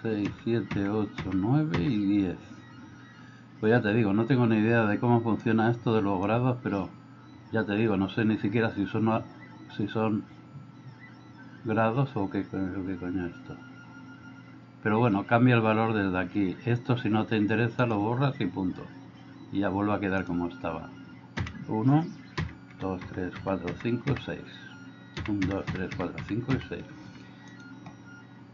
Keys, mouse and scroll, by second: 0.0-1.8 typing, 21.5-24.1 typing, 25.2-26.6 typing, 27.1 Escape, 27.5 click.